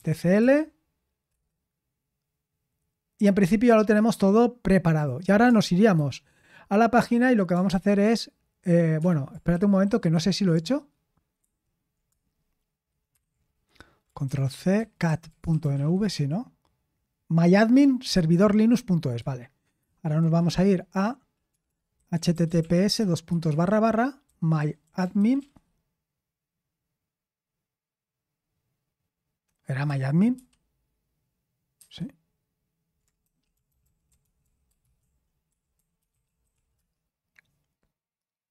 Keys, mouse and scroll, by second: 1.0-1.8 typing, 7.6 ctrl+l, 8.9 Escape, 9.5-9.8 typing, 10.1 Escape, 11.3 super+1, 13.1 super+7, 15.4 ctrl+c, 15.7-16.5 typing, 20.2 super+8, 21.5-26.0 typing, 30.3 super+7, 31.7 super+8, 32.9-37.0 typing.